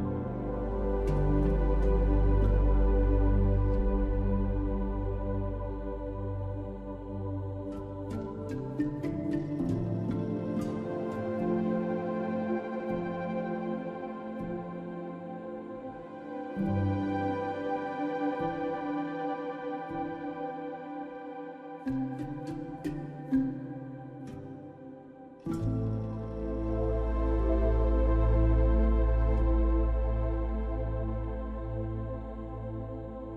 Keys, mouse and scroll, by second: 0.0 ctrl+s, 0.3 click, 0.6-1.6 drag, 4.2-5.3 drag, 5.3-7.3 middle drag, 7.3-8.4 drag, 8.4 middle click, 8.7 click, 9.3 middle click, 9.5 drag, 9.6-10.5 middle drag, 10.5 drag, 10.8 middle click, 11.0 drag, 11.3-13.9 middle drag, 14.0 middle click, 14.7-15.1 middle drag, 20.4-20.7 middle drag, 21.0-21.3 shift+middle drag, 21.6 middle click, 22.1-24.1 middle drag, 24.6 middle click, 25.7 middle click, 31.9-33.3 middle drag.